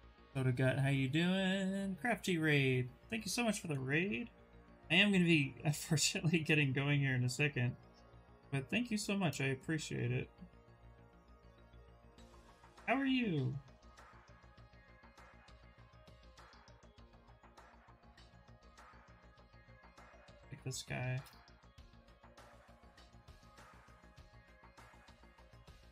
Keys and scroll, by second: 6.0 w, 6.7 q, 11.9 w, 18.8 q, 21.8 w.